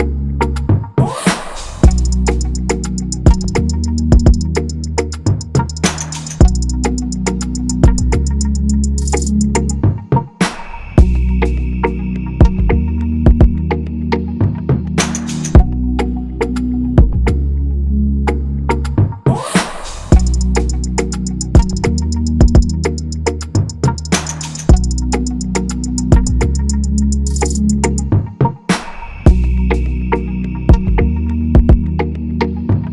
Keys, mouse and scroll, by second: 0.5 double click, 8.1 shift+click, 10.5 shift+click, 11.4 double click, 17.4 shift+Down, 20.9 double click, 22.5 right click, 26.0-26.7 typing, 31.2 right click.